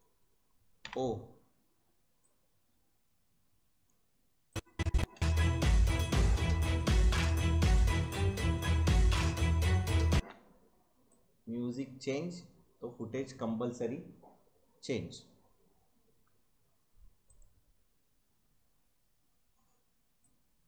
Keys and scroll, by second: 0.8 o, 5.1 space, 10.1 space.